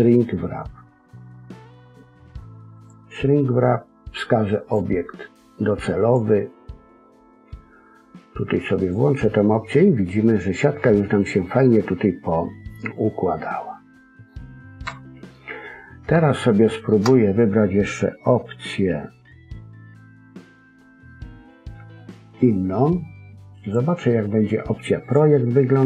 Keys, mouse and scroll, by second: 4.5 click, 8.7 click, 9.6 middle click, 14.8 KP_1, 15.2-15.7 scroll up 3, 15.7-16.1 scroll down 1, 16.2 shift+middle click, 16.2-16.9 scroll down 1, 23.5 click.